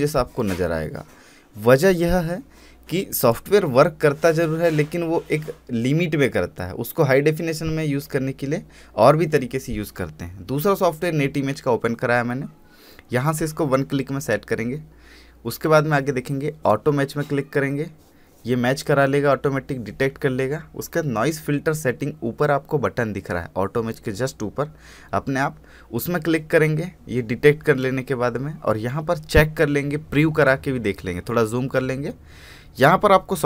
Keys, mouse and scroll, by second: 3.0-4.7 drag, 4.7 scroll up 1, 7.5 click, 14.1-16.4 drag, 16.4-16.8 scroll up 1, 19.7-20.0 scroll up 1, 20.0-21.3 drag.